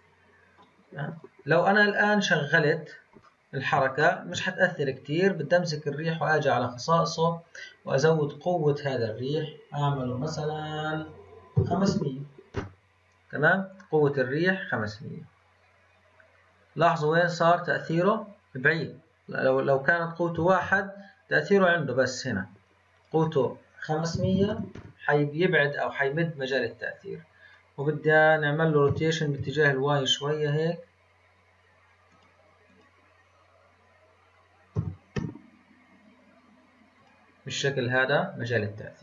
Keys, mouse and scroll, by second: 1.1 click, 3.2-4.8 shift+middle drag, 4.8 click, 7.5-10.6 drag, 11.8 KP_0, 14.0 click, 14.8 click, 15.2-16.1 scroll down 6, 16.1-19.2 scroll up 4, 19.4-22.4 drag, 22.9-24.4 drag, 24.4 KP_0, 27.4 click, 28.0 click, 28.8 r, 29.3 y, 32.1 click, 32.6 click, 34.7 r.